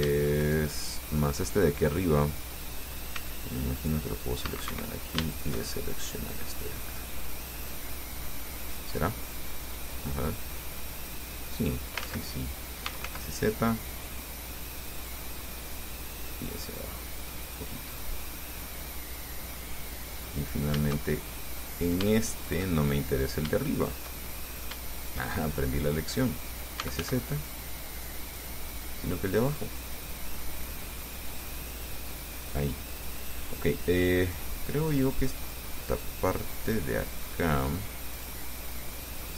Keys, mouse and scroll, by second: 0.6 shift+right click, 1.0 shift+middle click, 3.4 c, 4.0 click, 5.0 Escape, 5.5 shift+right click, 5.9-9.6 shift+middle drag, 10.4-12.3 drag, 12.3 ctrl+z, 12.8-13.8 typing, 15.2 click, 16.5-17.6 drag, 17.9-19.9 middle drag, 20.6 right click, 21.3 shift+middle click, 21.6 shift+scroll up 1, 22.7 shift+right click, 23.1 shift+middle click, 24.0 shift+right click, 24.4 shift+middle click, 25.2 shift+right click, 25.6 shift+middle click, 25.6 shift+click, 26.8-27.8 typing, 28.6 click, 29.5 click, 30.4-31.8 drag, 34.5 click, 35.6 right click, 36.1 right click, 36.6 middle click, 38.4 click.